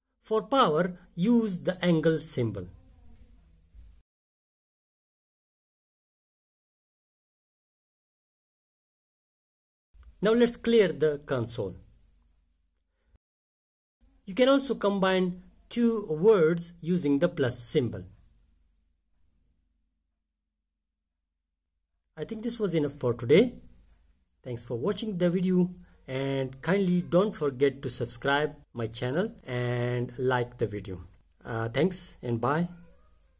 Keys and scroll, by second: 0.1 5, 1.5 shift+6, 2.0 3, 4.1 Return, 5.9-7.1 typing, 8.5-16.7 typing, 12.4 Return, 18.2-20.0 typing, 20.6 Return.